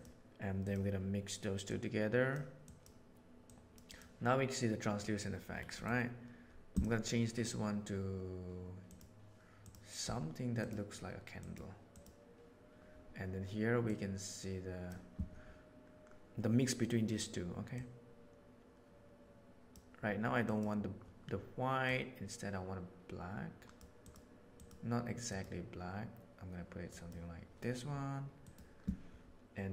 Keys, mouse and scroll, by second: 1.6-2.3 drag, 2.6 click, 3.4 click, 3.8 click, 13.8-14.8 drag, 17.7-19.6 drag, 28.4 click.